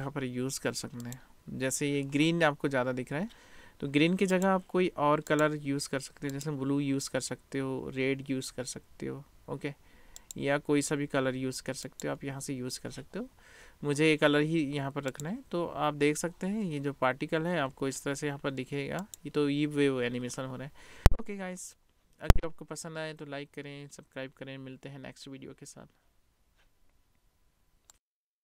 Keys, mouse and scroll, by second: 4.4 click, 4.8-6.6 right drag, 15.1 click, 19.2 click, 19.3 middle click, 19.6 middle click, 19.7 right click, 19.9 middle click, 23.3 click, 26.0 middle click, 26.3 click, 26.4 middle click, 26.9 click, 27.0 middle click, 27.5 middle click, 27.6 scroll up 1, 28.1 middle click, 28.3 middle click.